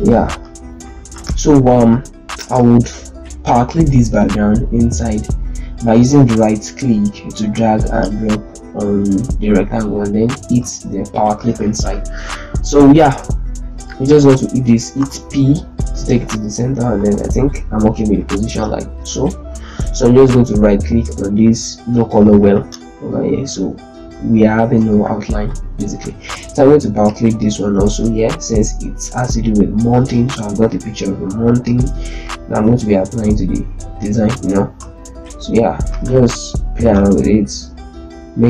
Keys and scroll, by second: 0.6 z, 1.6 ctrl+space, 14.9 p, 23.9 z, 24.5 ctrl+space, 34.7 z.